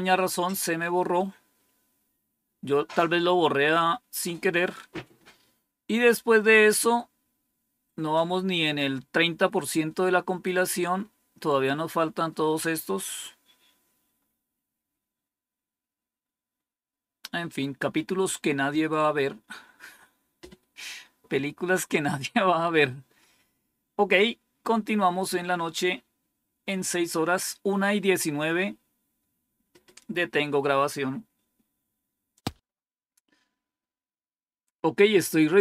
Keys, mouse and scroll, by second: 4.7 scroll down 2, 6.3 scroll down 2, 7.9 scroll down 2, 11.6 scroll down 1, 12.1-12.5 scroll down 2, 13.0-13.4 scroll down 2, 14.1-16.0 scroll up 1, 16.0-17.2 scroll up 1, 17.2-21.2 scroll up 1, 21.2-32.2 scroll up 1, 32.2 click.